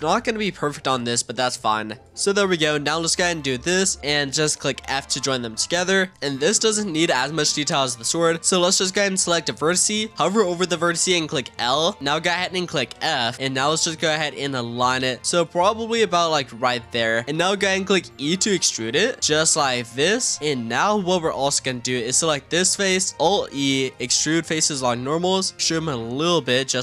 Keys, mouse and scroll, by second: 0.8 e, 3.5 shift+click, 4.8 f, 8.2 click, 11.4 l, 12.9 f, 13.3-14.1 middle drag, 14.1 click, 15.4 click, 18.1 e, 20.0 scroll down 2, 20.2-21.3 middle drag, 21.3 click, 22.5-23.1 middle drag, 23.1 scroll up 1, 23.3 alt+e.